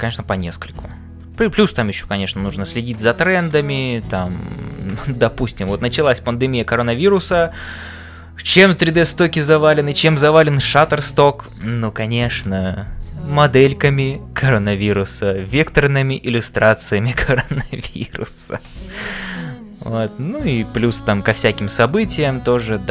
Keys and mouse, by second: 0.0-22.9 typing, 0.3 ctrl+r, 20.3 click, 20.9 middle click.